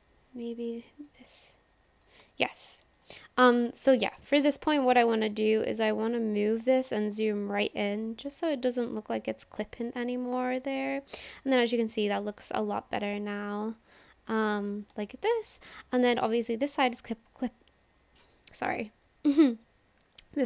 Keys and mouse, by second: 1.1 middle click, 2.3 shift+middle click, 2.5 shift+click, 3.8 middle click, 5.7-8.7 drag, 9.4 click, 9.8-10.9 middle drag, 11.6 middle click, 12.4-14.7 drag, 15.1 shift+click, 15.6 click, 16.4 shift+click.